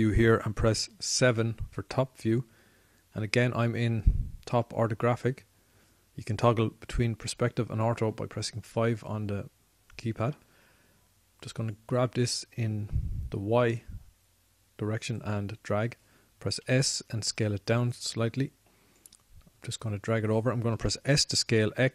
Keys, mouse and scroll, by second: 1.9 KP_7, 8.0 KP_5, 8.5 KP_5, 13.3-15.4 drag, 17.8 s, 19.7-20.7 drag.